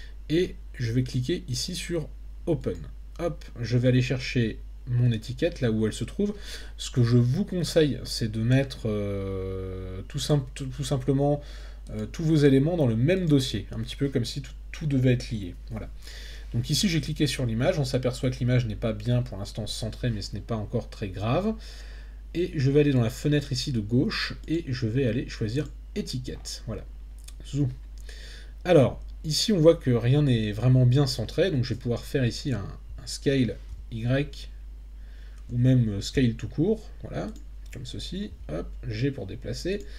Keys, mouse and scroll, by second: 2.6 click, 24.5-25.8 drag, 32.9 s, 33.7 y, 35.5 Escape, 36.1 s, 37.3 click, 38.3 g, 39.7 click.